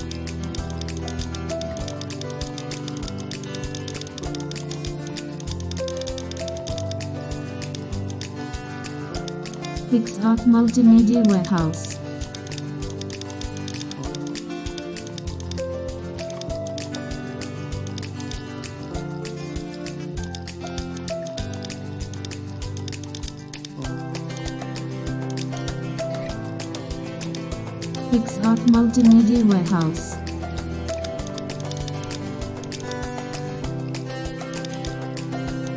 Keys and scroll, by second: 7.2 super+0, 9.4 super+space, 12.3 super+space, 33.2 super+0, 35.3 super+0, 35.5 super+space.